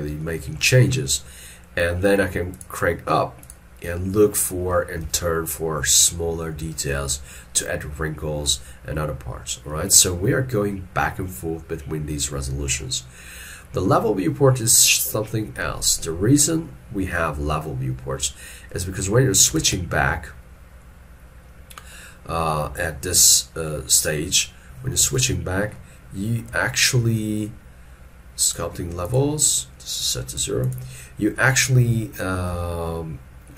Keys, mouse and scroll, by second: 0.3 middle click, 4.3 middle click, 5.1 alt+e, 5.5-7.2 scroll up 1, 10.1 shift+middle click, 19.7 ctrl+Tab, 25.2 alt+e, 25.8 middle click, 26.8 shift+middle click, 30.7 double click, 32.2 middle click, 32.6 shift+middle click.